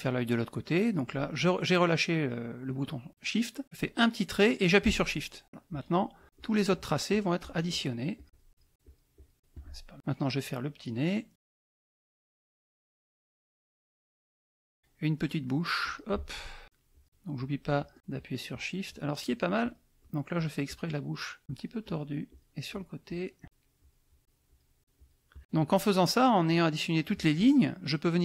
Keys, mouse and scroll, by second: 3.6-5.4 drag, 5.7 shift+click, 6.2 shift+click, 6.4 shift+click, 7.1 shift+click, 8.2-9.6 shift+drag, 11.3 click, 12.7 shift+click, 14.0 shift+click, 15.8 click, 16.9 shift+click, 17.3 shift+click, 17.7 shift+click, 18.1 shift+click, 18.5 shift+click, 18.8 shift+click, 19.2 shift+click, 19.6 shift+click, 20.0 shift+click, 21.4 shift+click, 22.3 shift+click, 22.7 shift+click, 23.8 shift+click, 24.2 shift+click.